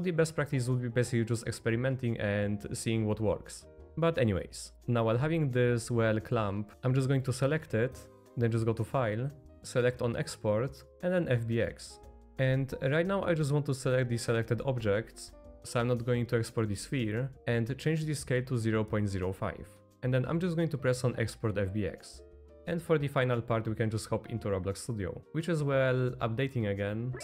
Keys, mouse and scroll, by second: 0.7 middle click, 1.9-2.8 middle drag, 3.2-3.8 middle drag, 3.8 z, 4.0 middle click, 4.6 click, 4.7 g, 8.6-11.7 drag, 22.8-23.2 middle drag, 23.7-24.0 middle drag, 24.4-25.2 middle drag.